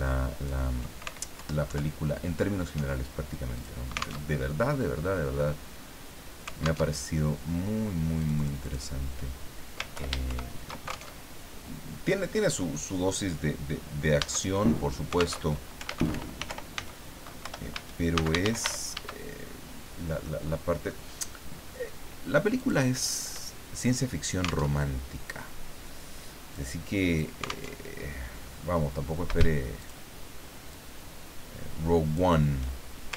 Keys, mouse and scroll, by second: 1.4 alt+Down, 3.5 click, 4.2 alt+Tab, 6.8 alt+Tab, 8.2 click, 9.9 ctrl+Home, 10.2 ctrl+shift+End, 11.1 ctrl+alt+shift+Tab, 15.4 alt+Tab, 15.6-19.1 typing, 17.4 Return, 20.2 middle click, 22.6 click, 24.8 alt+Tab, 26.5 click, 27.7 alt+Tab, 29.8 shift+click, 30.7-32.3 shift+drag.